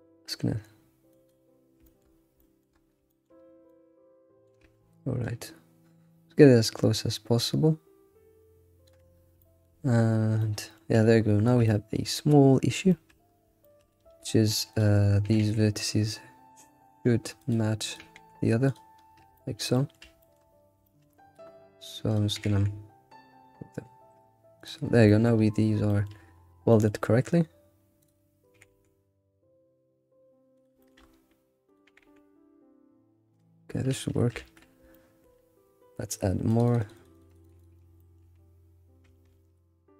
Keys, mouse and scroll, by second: 0.0 scroll down 3, 1.1 click, 1.9 shift+middle drag, 2.0-3.7 scroll up 9, 2.4 shift+middle click, 3.1 shift+middle click, 3.7-5.2 shift+middle drag, 5.2-8.3 shift+drag, 9.2-10.4 scroll down 7, 9.4 shift+middle click, 10.4 shift+middle click, 11.1-11.7 scroll up 6, 11.7-13.2 shift+middle drag, 13.2-13.7 scroll up 2, 13.7 shift+middle click, 14.1 Tab, 14.2 Tab, 14.7 click, 15.2 g, 17.8 click, 18.6 g, 19.1 scroll down 3, 19.3-20.5 shift+middle drag, 20.5-20.8 scroll down 4, 20.8 shift+middle click, 21.0-21.5 scroll up 6, 22.1 click, 22.3 g, 24.8 scroll down 1, 25.0 shift+middle click, 25.6 scroll down 4, 25.9-27.1 shift+middle drag, 27.1-28.0 scroll up 1, 28.0 click, 28.5 g, 30.8 shift+middle click, 30.9-31.4 scroll up 3, 31.6 click, 31.8 g, 33.7 scroll down 2, 34.3 ctrl+s, 34.6 scroll down 3, 34.9-36.5 shift+middle drag, 36.5-38.0 drag, 38.0 shift+middle click, 38.4-39.0 scroll down 2.